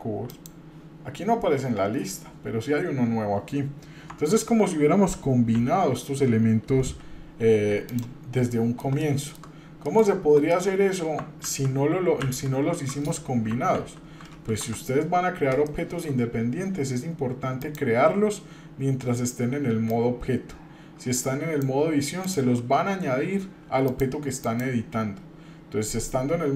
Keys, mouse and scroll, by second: 2.1-3.9 scroll down 1, 4.1 Tab, 5.5 f, 6.8 g, 8.5 middle click, 9.0 shift+middle click, 9.8 middle click, 10.1-10.4 scroll down 2, 10.5 shift+middle click, 11.4 ctrl+z, 12.2 ctrl+z, 14.5 Tab, 15.0-15.5 scroll up 2, 15.7-16.1 shift+middle drag, 17.6-22.4 drag, 23.9 click.